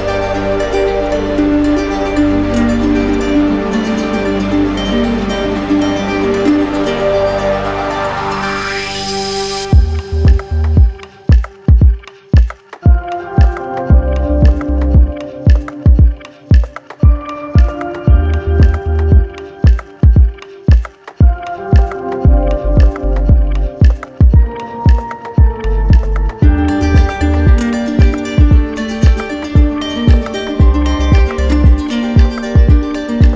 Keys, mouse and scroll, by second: 1.1 alt+click, 2.7 right click, 3.4 right click, 4.7 click, 6.1 right click, 7.9 alt+click, 8.7 right click, 10.2 click, 11.3 right click, 12.8 click, 13.7 click, 14.5 right click, 15.3 right click, 15.8 shift+right click, 16.5 right click, 18.7 right click, 20.5 click, 21.9 right click, 22.4 alt+right click, 23.3 right click, 23.9 alt+right click, 24.6 right click, 26.7 alt+click, 27.6 right click, 28.6 right click, 30.1 alt+click, 30.9 right click, 31.7 click, 32.2 click, 32.7 click, 33.0 click.